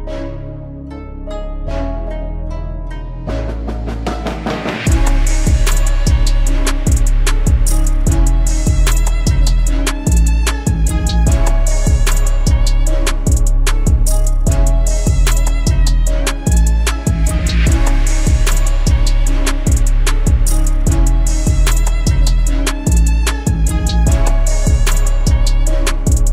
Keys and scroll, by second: 17.1 ctrl+j.